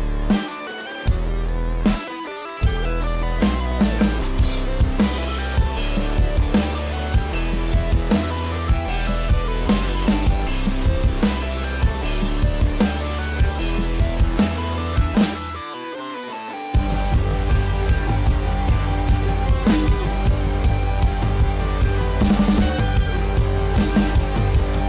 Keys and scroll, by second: 3.6 space, 6.6 ctrl+-, 12.9 space.